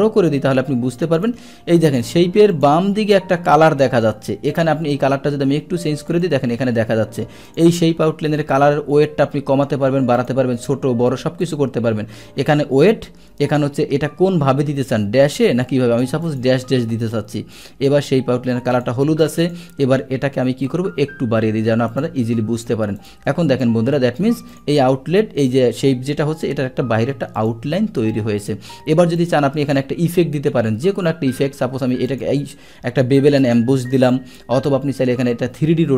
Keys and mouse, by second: 1.1 click, 2.0 click, 2.5 click, 4.5 click, 6.1 click, 7.5 click, 10.2 click, 11.4 click, 16.2 click, 17.5 click, 18.7 click, 19.4 click, 21.9 click, 23.0 click, 23.6 click, 24.5 click, 27.4 click, 29.2 click, 32.1 click, 34.0 click.